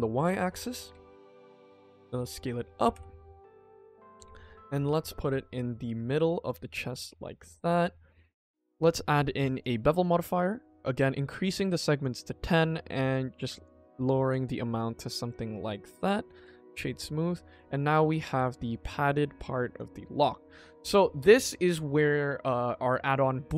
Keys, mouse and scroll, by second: 0.8 KP_1, 1.5 s, 2.4 middle click, 2.7 g, 4.2 KP_1, 4.4-4.9 scroll up 2, 4.9 g, 6.6 middle click, 7.0 scroll down 1, 7.1 scroll up 1, 7.3 shift+middle click, 7.5 middle click, 8.0 shift+middle click, 8.5 ctrl+s, 9.0 click, 10.6-12.0 drag, 12.3 click, 12.9 click, 13.1 click, 13.3 click, 13.5 click, 13.7 click, 13.9 click, 14.2 click, 14.7 middle click, 15.4-16.2 right drag, 16.2 middle click, 16.4-16.9 scroll down 2, 16.9 click, 17.2 middle click, 17.7-18.0 scroll up 2, 18.0 click, 18.2 g, 19.6 click, 20.6 click, 20.8 ctrl+s, 21.2 scroll down 1, 21.7-22.4 middle drag, 21.7-22.4 scroll down 1.